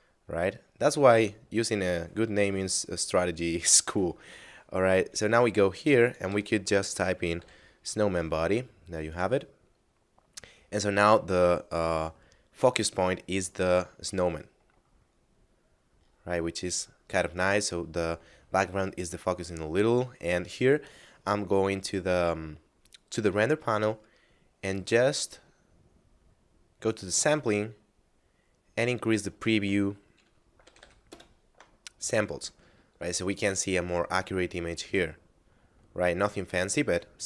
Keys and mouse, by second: 5.1 right click, 6.1 click, 6.3 s, 7.4 o, 9.0 click, 19.9 click, 24.0 middle click, 26.8 click, 27.6 middle click, 29.2 click, 30.5 5, 31.1 Return.